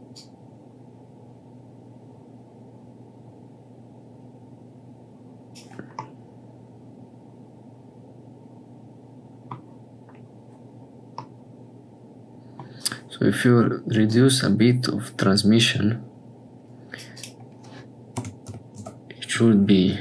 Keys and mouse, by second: 0.1-5.5 drag, 6.0-12.6 middle drag, 14.0-17.0 drag, 17.1-19.4 drag.